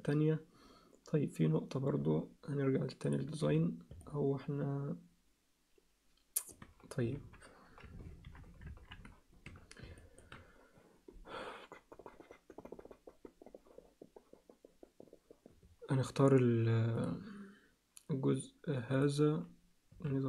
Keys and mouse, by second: 3.0 click, 3.4 z, 4.0-6.5 alt+middle drag, 7.1 KP_3, 8.7 ctrl+KP_1, 9.5 z, 10.0 ctrl+alt+click, 17.0 click, 19.9 s.